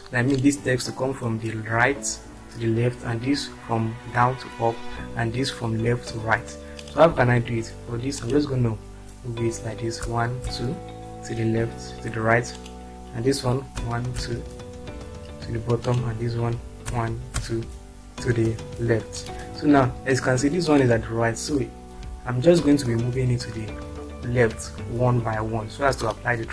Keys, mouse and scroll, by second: 10.0 Right, 12.5 click, 13.8 Down, 15.9 click, 16.9 Left.